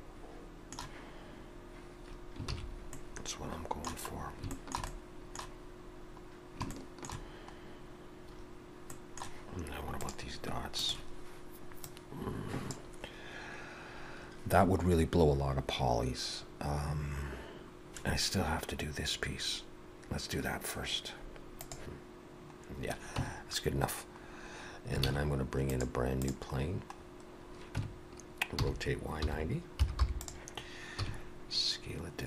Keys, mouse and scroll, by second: 2.6 ctrl+s, 3.0 middle click, 4.1-4.5 scroll up 3, 4.5 shift+middle click, 4.9 middle click, 6.8 shift+middle click, 7.6 scroll down 1, 9.0 middle click, 22.6-23.2 scroll down 2, 23.2 Tab, 24.3 scroll down 2, 25.1 shift+a, 26.5-27.6 scroll down 4, 27.8 Tab, 28.7 r, 31.0 s.